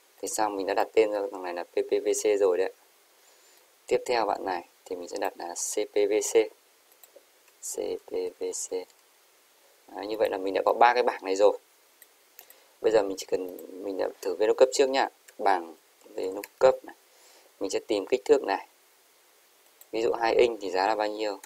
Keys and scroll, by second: 7.8-9.0 typing.